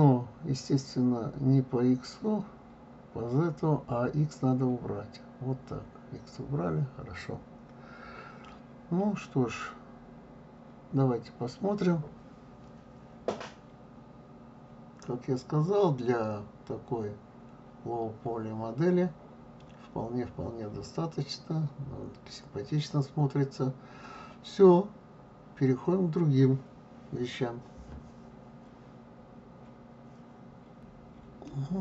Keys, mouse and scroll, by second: 4.9 click, 7.2 click, 8.4-11.4 middle drag, 14.6 click, 15.2 click, 16.0 click, 16.7 click, 17.9-20.9 middle drag, 24.0 scroll down 2, 24.9-25.3 scroll up 2, 27.1-28.4 scroll up 1, 31.4-31.8 middle drag.